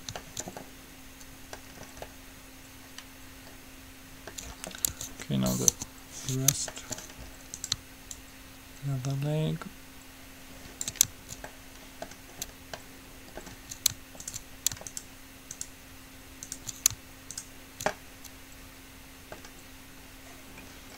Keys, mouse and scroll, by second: 3.0-4.2 middle drag, 4.6-6.0 middle drag, 5.2 Tab, 5.9 KP_3, 7.9-9.7 right drag, 8.3-10.2 drag, 11.7-13.0 middle drag, 18.4 right click, 19.0-20.5 middle drag, 20.7-20.9 scroll down 1.